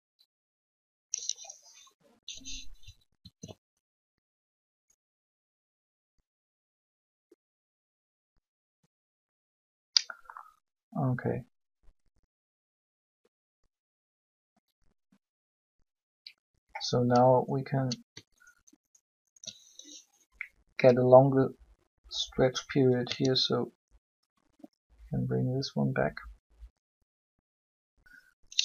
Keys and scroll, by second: 3.0 alt+a, 23.0 g.